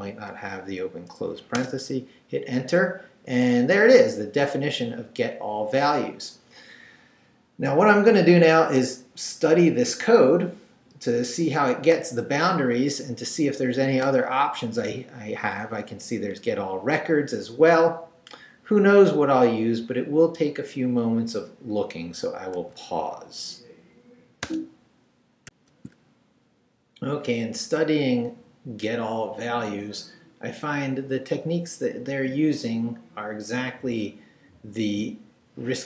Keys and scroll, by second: 1.5 Return, 24.4 alt+shift+super+space, 25.5 alt+shift+super+z.